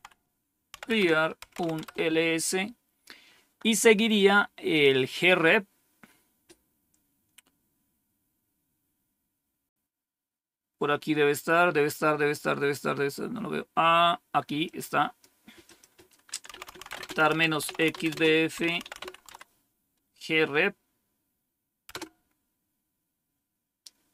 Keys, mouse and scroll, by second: 0.0-2.0 typing, 4.6 click, 14.6 click, 16.2-19.4 typing, 21.8 typing.